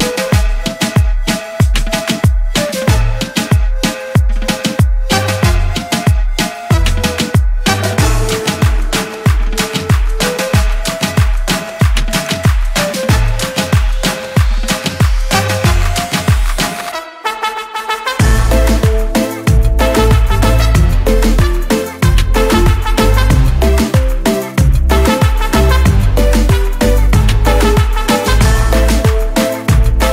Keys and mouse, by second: 1.8 click, 4.3 click, 8.8 click, 11.5 click, 11.6 click, 15.2 click, 17.8 click, 20.6 click, 21.5 click, 26.7 click.